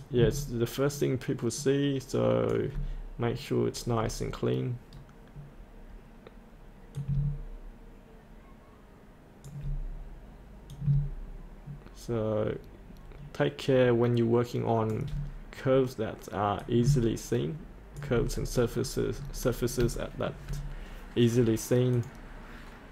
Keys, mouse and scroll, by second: 4.0 scroll down 1, 6.9 click, 17.6 click, 18.3-18.8 scroll up 1, 19.3-19.8 scroll up 1, 19.8 shift+scroll up 1, 20.0 middle click, 21.9 click.